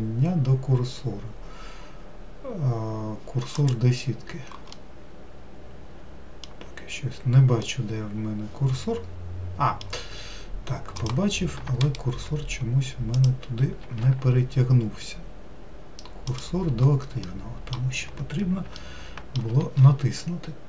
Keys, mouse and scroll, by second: 5.0-6.9 middle drag, 6.9-7.9 scroll down 3, 7.9-10.4 middle drag, 10.4-11.2 scroll up 2, 11.2 click, 12.1-13.4 shift+right drag, 13.4 click, 14.1 shift+s, 17.5 middle click, 18.3-19.0 scroll up 2, 19.0-20.6 shift+middle drag.